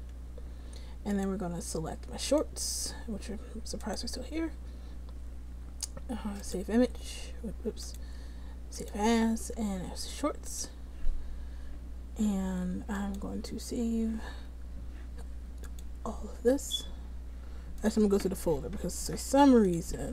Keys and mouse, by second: 11.3-13.7 drag.